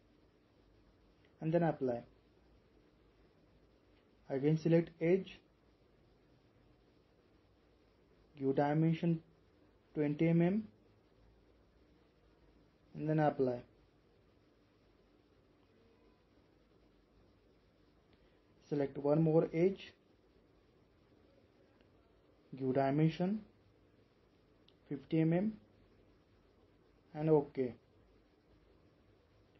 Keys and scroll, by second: 0.0-0.3 typing, 24.8-25.2 typing.